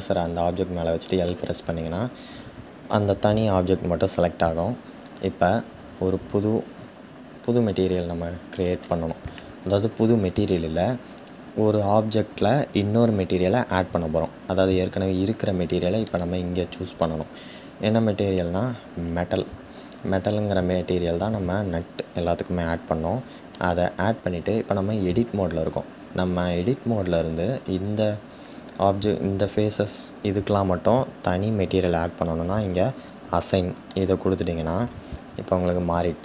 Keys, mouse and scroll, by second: 8.6-23.6 drag, 33.9-36.2 drag.